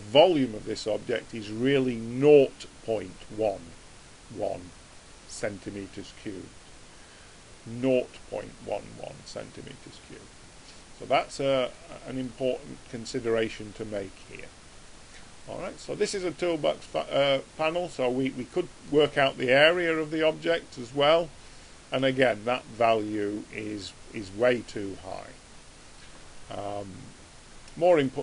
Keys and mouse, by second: 11.2 middle click, 12.0-19.1 middle drag, 19.1 click.